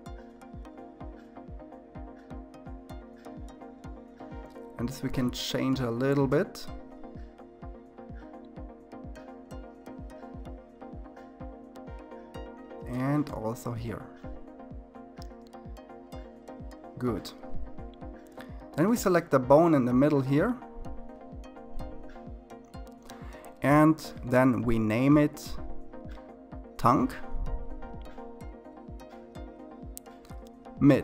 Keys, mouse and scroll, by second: 1.4 click, 2.9 g, 9.8 click, 11.1 g, 13.3-15.7 scroll down 2, 15.7 click, 17.5 click, 23.6-26.3 drag, 26.3 BackSpace, 27.3 BackSpace, 27.6 BackSpace.